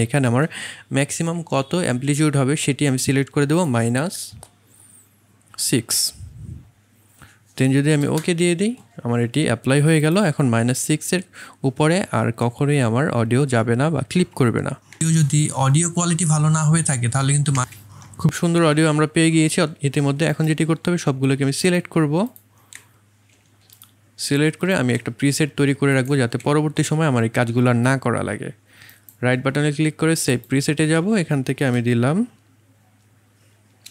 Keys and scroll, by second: 4.3 KP_Subtract, 5.5 KP_6, 8.0 Return, 14.9 space, 17.5 space.